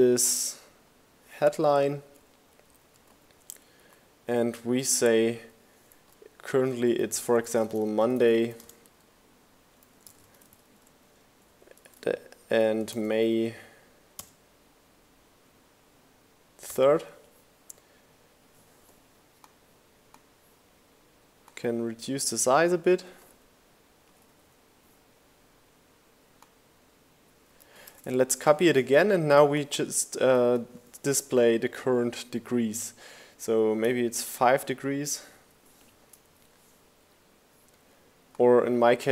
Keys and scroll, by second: 0.1 shift+Down, 0.3 shift+Left, 0.5 shift+Down, 1.2 shift+Left, 2.2 shift+Down, 3.7-6.4 typing, 7.5-11.7 typing, 14.3 3, 21.7 Down, 25.6 super+v, 25.9 shift+Down, 29.0 super+a, 31.6 5.